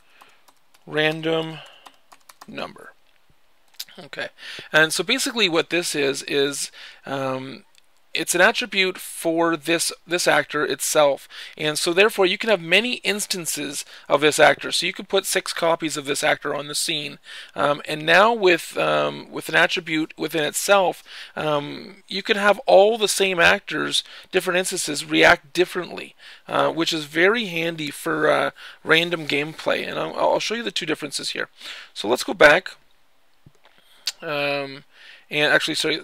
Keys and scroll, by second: 0.0-2.6 typing.